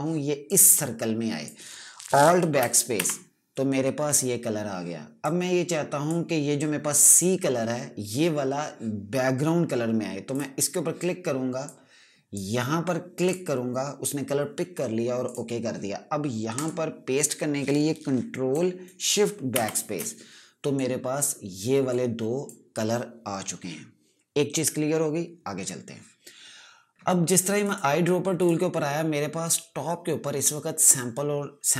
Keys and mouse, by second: 0.3 click, 3.5 alt+BackSpace, 5.7 click, 10.9 click, 20.1 ctrl+shift+BackSpace, 21.3 click, 28.1 right click, 28.9 click.